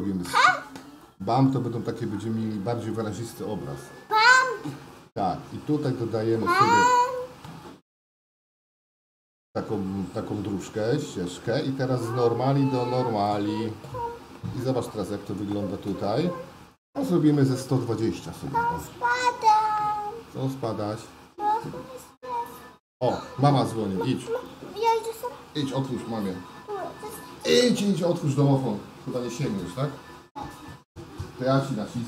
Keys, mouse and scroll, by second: 2.5-21.6 drag, 25.0-32.0 shift+middle drag.